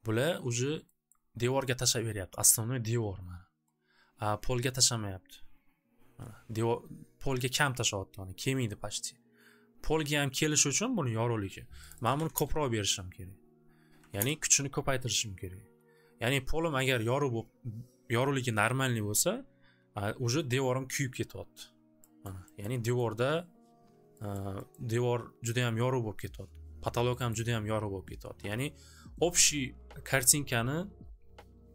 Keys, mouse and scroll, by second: 1.1 scroll, 3.7 scroll, 11.9 click, 12.0 click, 12.1 2, 12.3 Return, 13.9 3, 14.1 Return, 20.5 scroll down 1, 20.9 scroll, 22.2 scroll, 22.6 middle click, 23.0 middle click, 24.3 middle click, 24.6-25.0 scroll, 27.3 scroll.